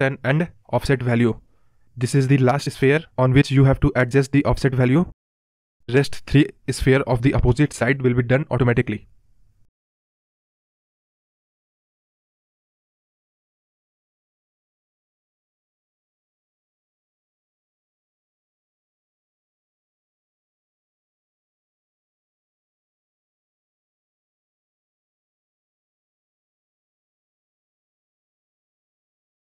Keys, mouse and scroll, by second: 1.1-2.5 scroll up 8, 2.5-3.1 scroll up 2, 3.1-3.5 scroll down 3, 3.5 space, 4.1-9.4 drag, 9.9 right click, 10.1-11.2 scroll down 4, 11.6 space, 12.0-13.8 drag, 13.8 space, 14.1 space, 14.7-15.1 scroll up 4, 15.1-15.9 scroll down 3, 15.9-16.7 middle drag, 16.7 scroll up 2, 16.9 scroll down 1, 17.0-18.5 middle drag, 18.5-21.9 drag, 21.9 right click, 22.8 click, 23.2 scroll up 10, 23.5-23.8 middle drag, 23.8 space, 24.0-24.8 scroll down 6, 24.3 space, 24.8 middle drag, 25.1 space, 25.5 middle drag, 25.7 space, 27.9 click.